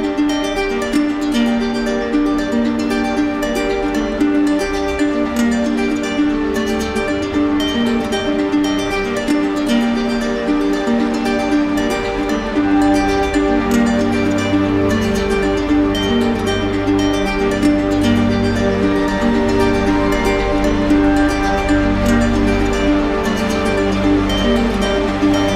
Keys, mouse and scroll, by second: 6.3-7.4 drag, 9.5-10.7 drag, 14.7-15.8 drag, 19.6-20.6 drag, 21.3-22.4 drag, 23.7 typing.